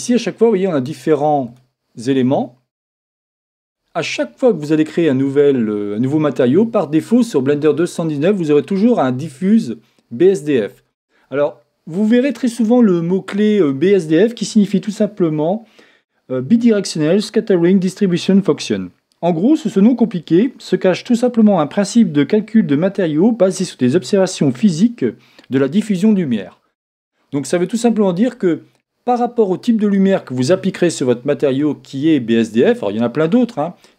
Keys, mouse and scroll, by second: 1.4-5.4 drag, 9.5-11.3 drag.